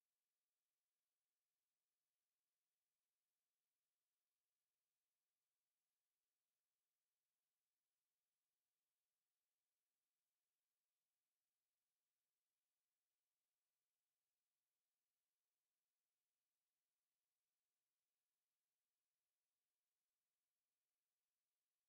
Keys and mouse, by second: 0.2 shift+a, 6.3 s, 10.4 KP_Divide, 11.8 z, 13.6-13.9 drag, 15.7-18.7 middle drag, 20.9-21.8 middle drag, 21.0 s.